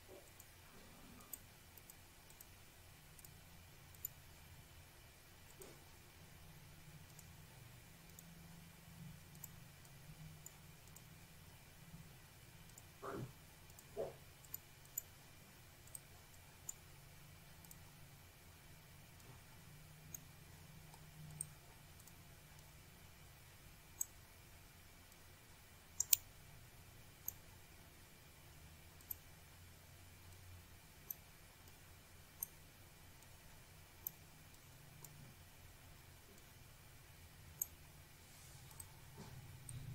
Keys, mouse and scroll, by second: 0.1 click, 0.3 click, 0.8 click, 1.0 click, 2.2 2, 3.7 click, 5.1-6.3 drag, 8.9 click, 12.0 click, 12.7 click, 14.2 click, 15.9 click, 18.8 Delete, 20.5 click, 22.4 click, 22.5 double click, 23.2 click, 24.0 click, 25.6 click, 27.0 click, 28.0 click, 29.1 click, 29.6 click, 30.6 click, 32.3 click, 33.3 click, 34.4 click, 37.1 click, 38.6 click.